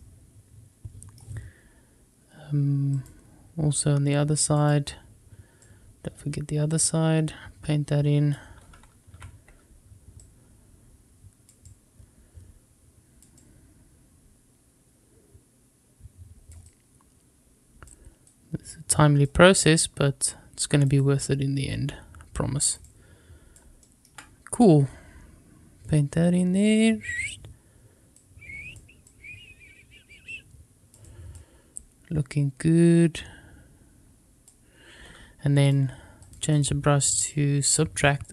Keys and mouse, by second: 2.9 click, 4.5 click, 5.5-8.3 drag, 9.1 ctrl+z, 9.1 ctrl+a, 10.1-11.4 drag, 11.6-13.1 drag, 13.3-16.4 drag, 16.6-17.8 drag, 18.2 click, 19.5-20.8 drag, 20.9-22.7 drag, 22.7 click, 24.5-27.2 drag, 28.1 click, 29.0-30.8 drag, 30.9 click, 31.8-34.4 drag, 35.5 click, 36.5-37.7 drag, 38.2-38.3 drag.